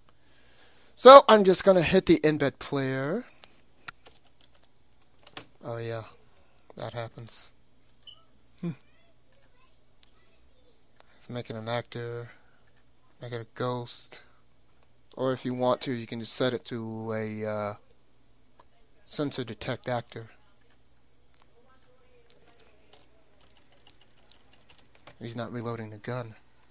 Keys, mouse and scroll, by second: 0.2-1.4 drag, 2.4 click, 7.1 click, 7.8-18.2 drag, 7.9-11.5 right drag, 20.6-23.2 drag, 23.0 p, 25.0 p.